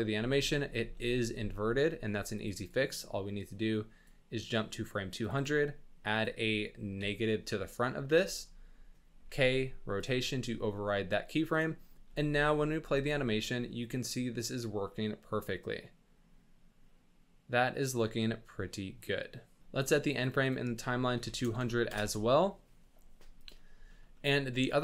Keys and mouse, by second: 0.1 space, 1.4 space, 2.3 click, 2.5 click, 2.9 click, 5.2-7.8 drag, 9.2 k, 12.0 space, 12.7 z, 13.1-13.4 drag, 14.9-19.6 middle drag, 19.6 space, 20.4-21.9 drag, 21.5 KP_0, 23.9 shift+middle drag, 24.1 middle click, 24.7-24.8 middle drag.